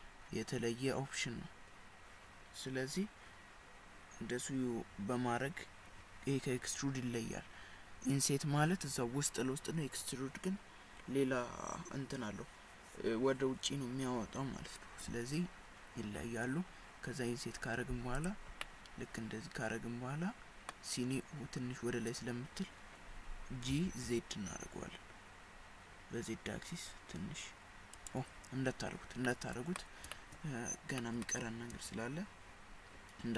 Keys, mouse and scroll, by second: 18.7 middle click, 23.7 g, 29.3 middle click, 30.2 shift+middle click, 31.0 middle click, 31.8 KP_1.